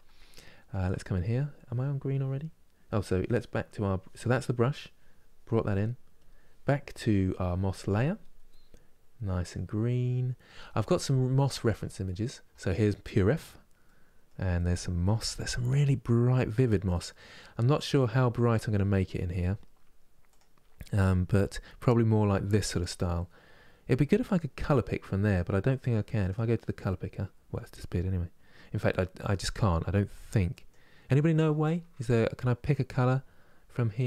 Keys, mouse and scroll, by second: 0.0-8.8 ctrl+middle drag, 8.8-17.1 drag, 17.1 middle click, 17.6 scroll down 2, 18.0-27.1 middle drag, 27.1 click.